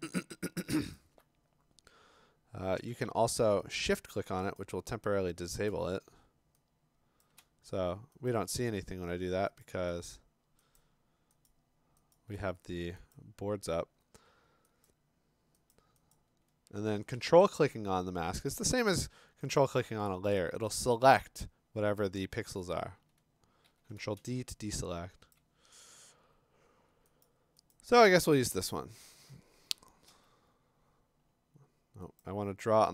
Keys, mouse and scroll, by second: 1.0 alt+click, 3.8 shift+click, 4.3 alt+click, 4.6 alt+click, 9.6 click, 10.1 click, 10.8 click, 11.5 click, 12.1 click, 16.1 click, 19.6 ctrl+click, 23.1 click, 23.6-25.9 typing, 25.3 click, 27.3-27.7 click, 27.9 click, 28.3 click, 28.7 click, 30.1 alt+BackSpace, 32.2 click.